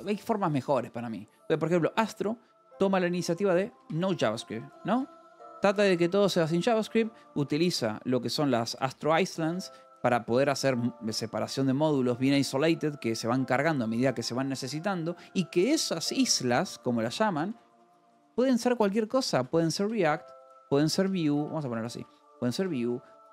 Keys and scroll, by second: 3.5-10.2 typing, 17.3-23.3 typing.